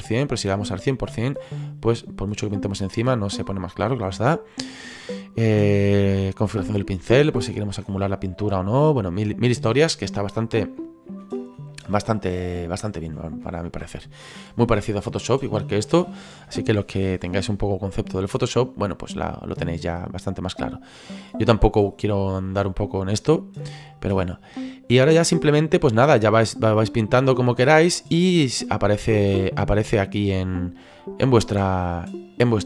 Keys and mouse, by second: 5.3 click, 11.1 ctrl+z, 24.0 middle click, 26.2 click, 27.8 click, 29.4 middle click, 30.2 click, 32.5 middle click.